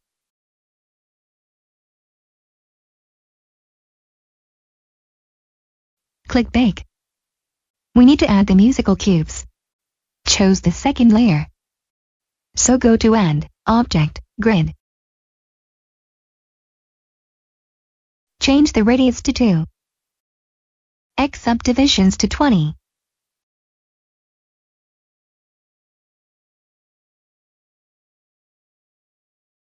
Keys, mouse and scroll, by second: 0.5-1.4 typing, 3.2-4.9 typing, 5.3 Return, 6.5 click, 11.1 click, 18.5 click, 20.6 2, 20.9 Return, 21.2 click, 22.8-23.2 typing, 25.0 Return.